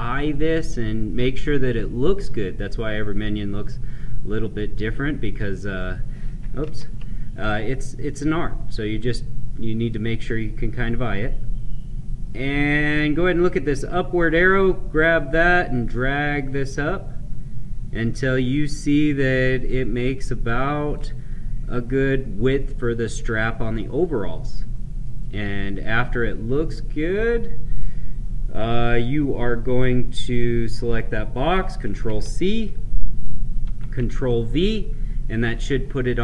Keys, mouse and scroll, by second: 4.3-6.6 drag, 6.6 ctrl+z, 7.3 click, 12.1 scroll up 1, 14.2-23.4 drag, 25.0-30.2 right drag, 30.2 click, 31.9 ctrl+c, 33.6 ctrl+v.